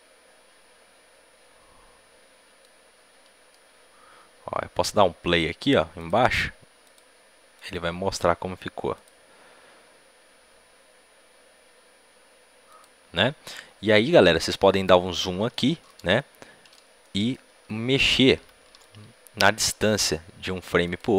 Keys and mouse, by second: 5.9-10.8 drag, 12.6-21.1 drag, 20.8 a, 20.8 b, 20.8 g.